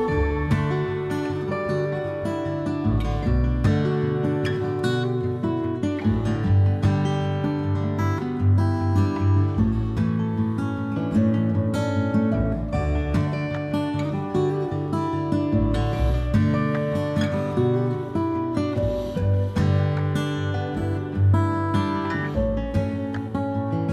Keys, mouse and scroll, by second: 0.1 middle click, 0.9-5.0 drag, 3.6 a, 5.0-13.5 shift+middle drag, 5.7 Tab, 6.5 Tab, 8.3 c, 9.4 a, 9.5 a, 9.9 a, 12.2 a, 13.5-20.8 drag, 20.8-23.9 middle drag, 21.7 ctrl+s.